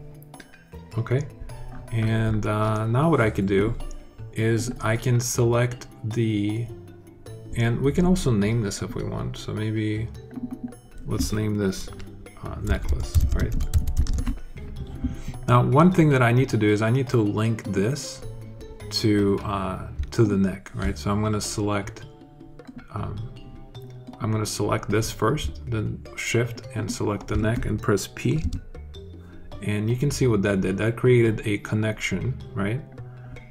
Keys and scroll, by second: 12.3-14.3 typing, 29.2 p.